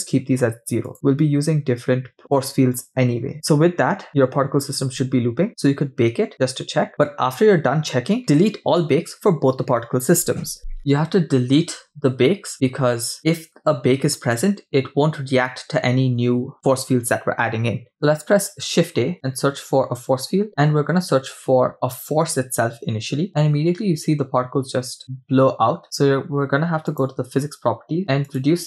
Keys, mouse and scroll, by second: 0.9 click, 5.5 scroll up 7, 18.1 shift+a, 23.3 scroll down 8, 23.6-25.0 scroll up 5, 26.9 click, 28.3-28.6 drag.